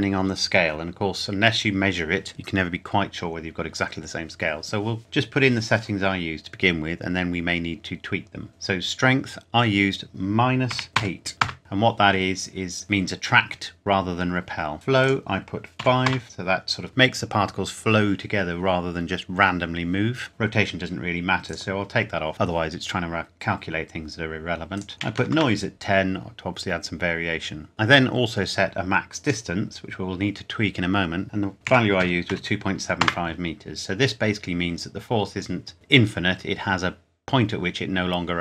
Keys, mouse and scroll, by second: 8.5 click, 10.7 KP_Subtract, 10.9 KP_8, 11.4 KP_Enter, 15.0 click, 15.8 KP_5, 16.1 KP_Enter, 21.5 click, 24.7 click, 25.0 KP_1, 25.3 KP_Enter, 27.7 scroll down 1, 29.2 click, 31.5 KP_2, 32.0 KP_7, 32.9 KP_5, 33.0 KP_Enter.